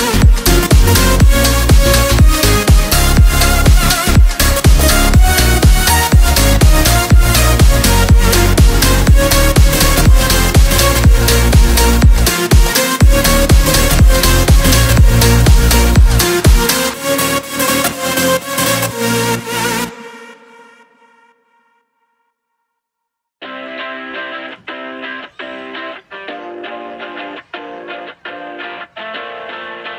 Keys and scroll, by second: 0.4 ctrl+g, 2.3 space, 5.4 space, 7.2 Left, 12.5 ctrl+d, 13.6 ctrl+z, 19.4 ctrl+g, 20.1 b, 20.2 a, 20.4 e, 20.5 r, 20.7 Return, 21.6 space, 23.6 Down, 24.6 Down, 25.3 Up, 25.8-29.9 typing.